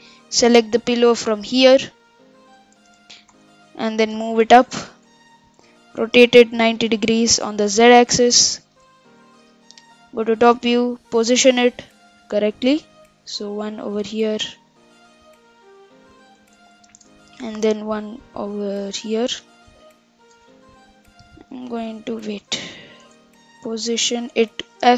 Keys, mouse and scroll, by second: 1.8 click, 2.5 click, 3.3 KP_1, 4.1 g, 6.2 r, 8.8 KP_7, 9.5-10.0 scroll down 4, 10.0-10.6 scroll up 3, 10.6 s, 11.6 g, 12.7 s, 13.4 g, 16.9 shift+d, 19.5 s, 21.4 ctrl+z, 21.5 ctrl+z, 22.4 g, 23.1 s, 24.6 g.